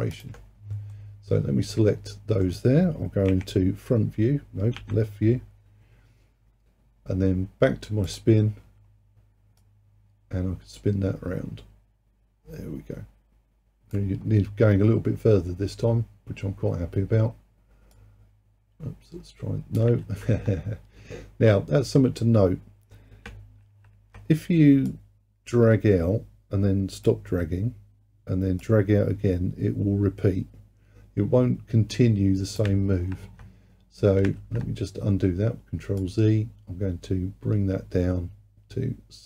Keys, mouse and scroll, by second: 0.2 shift+click, 1.0-3.4 middle drag, 3.4 KP_1, 4.8 KP_3, 8.1-12.7 drag, 18.0-20.1 drag, 20.1 ctrl+z, 23.7 ctrl+z, 24.9-28.0 drag, 28.7-31.7 drag, 33.0 ctrl+z, 34.4 ctrl+z, 36.0-39.1 drag.